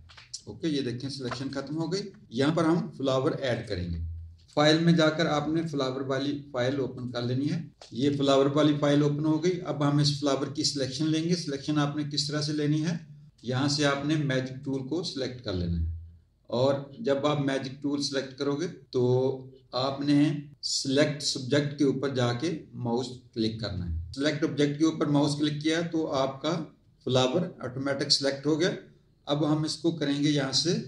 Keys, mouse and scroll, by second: 1.2 alt+z, 1.3 alt+click, 3.5 click, 4.5 click, 7.0 click, 7.7 click, 13.3 click, 14.6 click, 22.9 click.